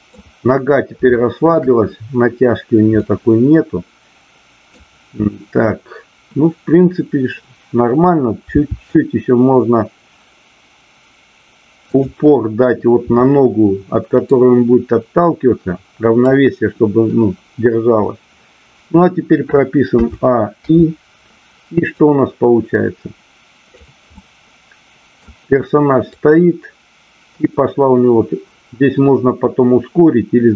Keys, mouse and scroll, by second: 1.1-1.4 shift+middle drag, 2.9-4.7 middle drag, 8.6 r, 11.8 click, 14.3-16.4 drag, 22.1-23.8 drag, 24.2-25.3 middle drag, 26.1-30.5 drag.